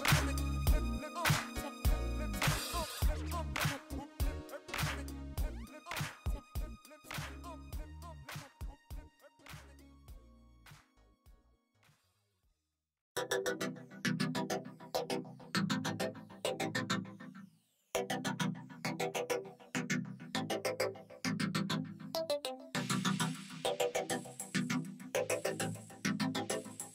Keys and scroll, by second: 1.2 shift+a, 4.4 ., 5.1 Tab, 5.6 s, 5.7 z, 6.3 Tab, 6.5 g, 6.6 z, 7.3 Tab, 7.7 s, 8.9 s, 10.9 s, 13.1 s, 13.6 Tab, 14.0 g, 14.1 z, 17.1 Tab, 18.8 ctrl+r, 20.1 Return, 20.6 ctrl+b, 21.7 Escape, 22.1 2, 22.7 ctrl+b, 23.7 Escape, 24.3 ctrl+z, 25.6 ctrl+r, 26.3 3, 26.5 Return.